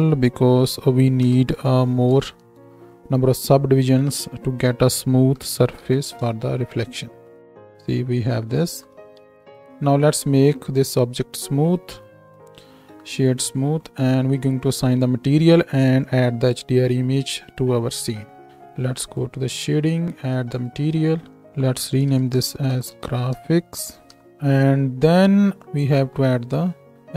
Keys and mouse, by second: 9.2 Tab, 13.0-19.2 drag, 19.2-20.6 middle drag, 20.6-24.2 drag, 24.2-27.0 middle drag, 27.0 click, 27.0-27.1 middle drag.